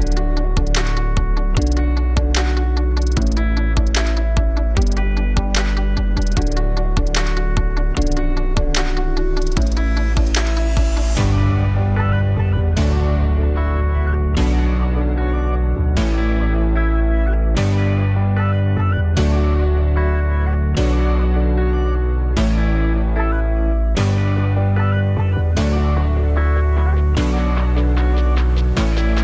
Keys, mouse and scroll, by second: 0.9 alt+click, 1.7 g, 3.6 Tab, 3.8-4.9 alt+drag, 4.5 1, 5.3 alt+click, 5.6 z, 6.0-7.2 drag, 7.2 g, 9.4 alt+click, 9.9 KP_1, 10.6 click, 13.2-15.2 alt+drag, 17.7 click, 19.3 Tab, 19.5 alt+click, 20.2-20.6 scroll down 4, 20.8 alt+click, 22.4-24.6 drag, 24.6 BackSpace, 25.7-29.2 drag.